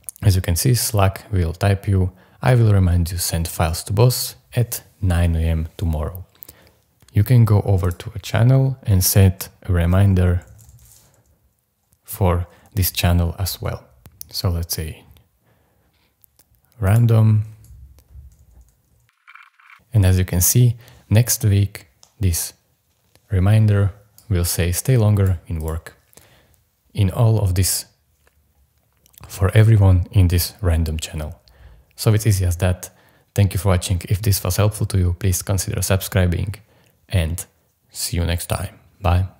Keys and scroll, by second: 9.1 shift+ú, 10.2-11.3 typing, 11.9 Return, 19.0-20.2 typing.